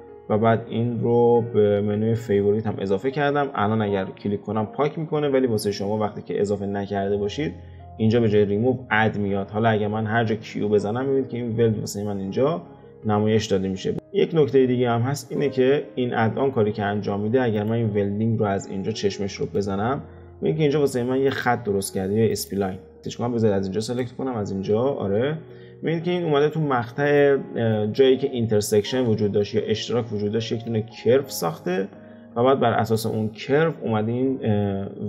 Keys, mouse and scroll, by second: 10.5 q, 13.9 click, 17.5 click, 19.4 click, 21.3 click, 22.3 click, 23.0 click, 23.8 click, 24.8 alt+q, 25.2-25.6 scroll up 2, 25.6-26.5 middle drag, 26.5 scroll down 2, 27.1 click, 27.7 click, 29.0-32.1 middle drag, 32.1 alt+q, 32.6-34.5 middle drag, 34.5 click.